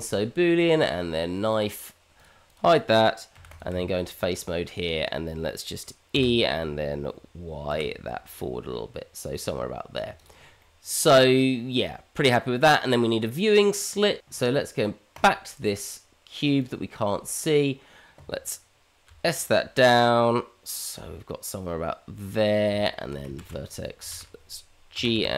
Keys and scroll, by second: 3.3 h, 3.7 Tab, 6.1 e, 9.5 Tab, 19.0 s, 22.7 Tab, 23.4 shift+z, 24.2 shift+z, 24.9 g.